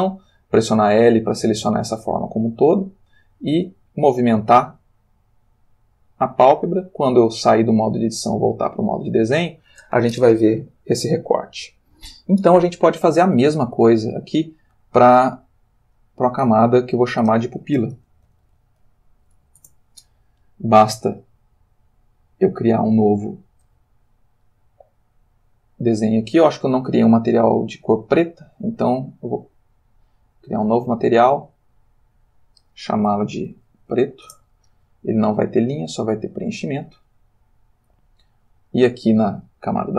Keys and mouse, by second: 1.2 g, 5.9 click, 8.0 click, 8.7 click, 14.2 click, 15.9 click, 16.7 click, 17.9-19.4 typing, 19.6 shift+Return, 21.6 click, 26.4 click, 30.5 click, 31.7 click, 32.4 click, 33.2 shift+p, 33.5 shift+r, 33.8 shift+t, 33.9 shift+o, 34.3 shift+Return, 35.5 click, 36.4 click, 38.4 click.